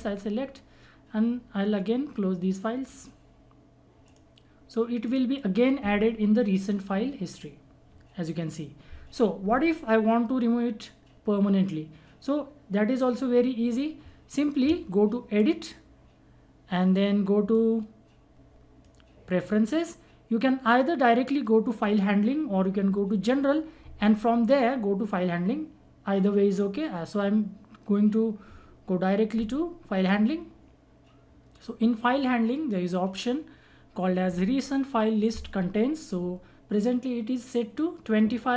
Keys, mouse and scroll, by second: 2.8 click, 3.2 click, 15.3-22.0 drag, 30.0 click.